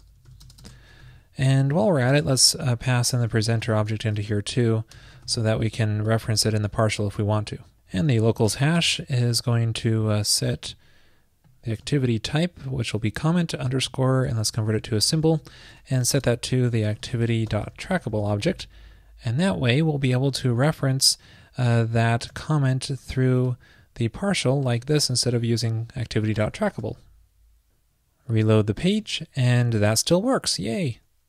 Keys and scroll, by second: 1.1 super+v, 6.2 super+Return, 11.9 super+c, 13.0 super+v, 15.5 super+Right, 22.3 super+s, 26.9 super+s.